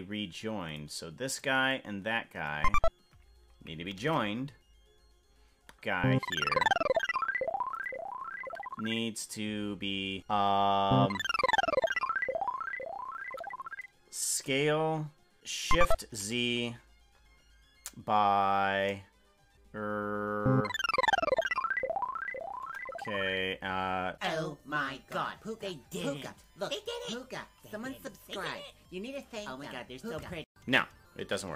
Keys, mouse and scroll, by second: 5.3 ctrl+j, 6.5 Tab, 7.7 right click, 14.2 s.